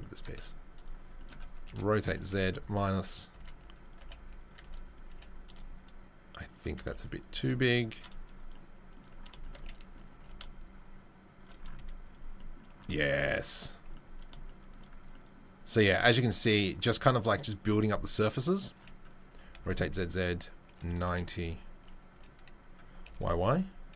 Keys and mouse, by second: 1.6 r, 3.3 s, 4.0 g, 4.5 s, 5.1 g, 6.7-23.9 right drag, 6.7 s, 7.3 g, 10.1 g, 11.7 z, 17.6-18.8 drag, 19.3 r, 22.1 g.